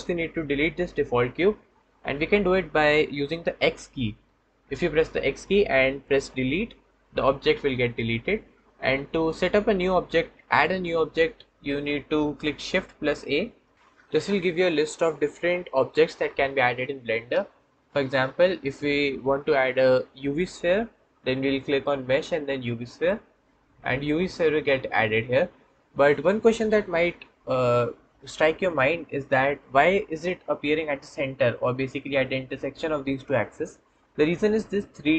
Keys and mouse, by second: 6.2 x, 13.0 shift+a.